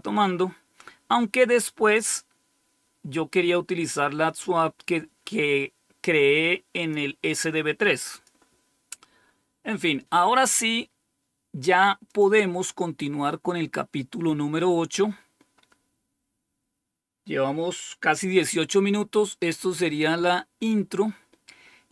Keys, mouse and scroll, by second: 1.9-6.9 drag, 8.0 click, 12.0 click, 12.8-13.3 scroll down 3, 19.6 click.